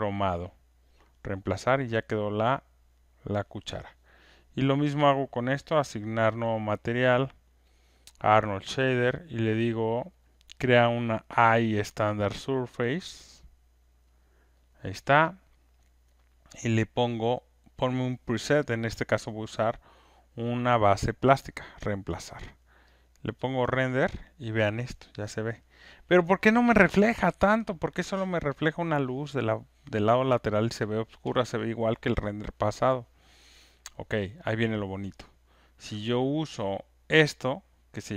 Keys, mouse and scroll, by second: 0.8 click, 2.2 click, 6.3 right click, 7.8 click, 14.2 click, 21.0 click, 23.0 click, 33.8 click, 37.9 click.